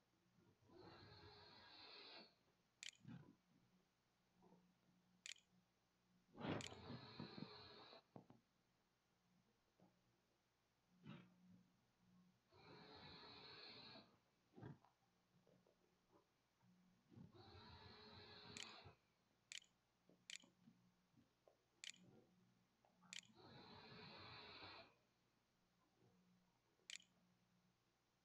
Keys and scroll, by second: 1.5-4.4 typing, 5.6 ctrl+z, 6.0 ctrl+s, 18.0-20.4 typing, 18.2 Return, 21.6 Tab, 22.2-24.0 typing, 25.4-28.2 typing.